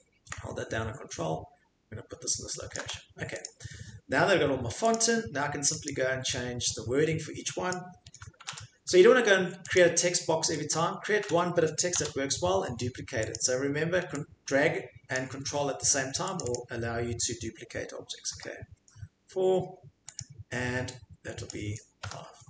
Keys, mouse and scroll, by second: 2.7 ctrl+click, 3.4 click, 4.9 click, 5.9 click, 7.7 click, 8.4 BackSpace, 8.5 BackSpace, 9.8 click, 10.7 click, 11.2 BackSpace, 12.0 BackSpace, 13.3 click, 15.1 click, 16.4 click, 16.5 click, 18.3 4, 20.2 click, 21.5 click, 22.0 5.